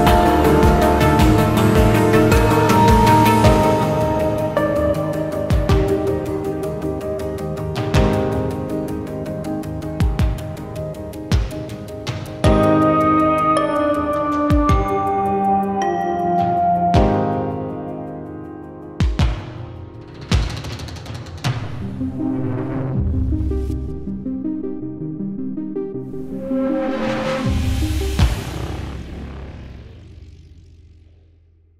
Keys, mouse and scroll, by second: 1.3 scroll down 1, 2.1 scroll up 1, 2.4 shift+click, 7.1 scroll up 1, 7.3-8.3 scroll down 1, 8.3-8.8 scroll up 1, 8.8 scroll up 1, 9.0 shift+click, 10.1 shift+click, 15.9 scroll up 1, 16.6 shift+click, 20.0-20.4 scroll up 1, 20.4-21.4 scroll down 1, 22.4 Return, 25.7 right click, 28.8 scroll up 1, 29.0-31.7 scroll down 1.